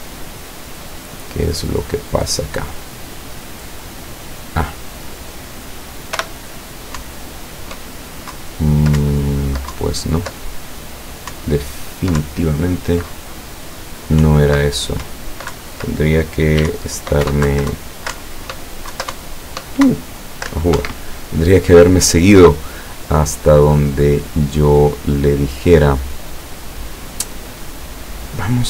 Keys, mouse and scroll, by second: 1.1-2.0 drag, 3.6 click, 4.7 click, 6.2 p, 7.0 Up, 8.4 Down, 9.1 Up, 9.8 Down, 11.4 Up, 12.3 Down, 14.3 Up, 15.1 Right, 15.6 Left, 16.7 w, 16.8 Right, 17.3 Up, 17.5 Left, 18.2 Up, 19.0 Down, 19.2 Up, 19.9 Down, 20.8 Escape, 26.2-28.6 drag.